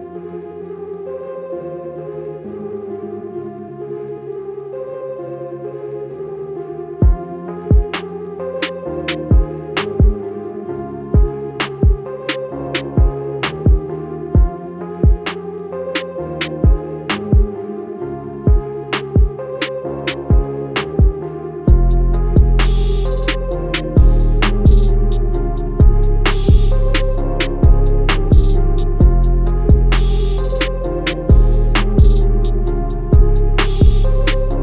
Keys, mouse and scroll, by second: 1.1 ctrl+z, 2.0 click, 5.1 ctrl+z, 6.2 click, 7.8 alt+scroll down 1, 9.3-10.3 alt+scroll down 2, 10.3 right click, 11.1 click, 13.2 ctrl+z, 14.3 click, 14.8-16.2 alt+scroll up 2, 16.2 Left, 18.1 ctrl+z, 18.6 click, 23.5-23.9 alt+scroll down 1, 24.6 alt+scroll down 1, 25.4 click, 26.2 alt+scroll down 1, 27.1 alt+scroll down 1, 27.7 click, 29.5 alt+scroll up 1, 30.6 scroll down 2, 31.3 scroll down 1, 33.8 click.